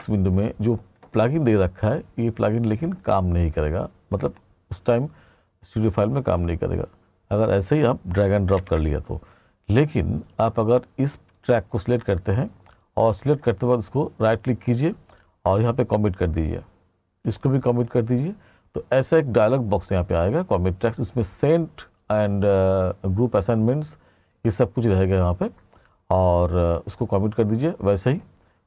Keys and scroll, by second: 0.0 ctrl+=.